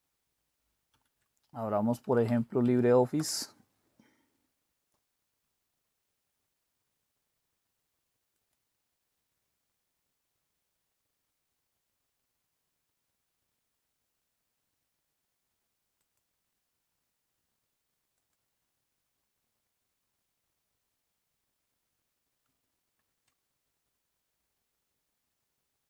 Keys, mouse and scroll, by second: 0.9 super+d, 2.1 Down, 2.3 Down, 2.6 Up, 3.2 Return, 8.3 click, 16.0 click, 18.2 click, 23.0 super+(.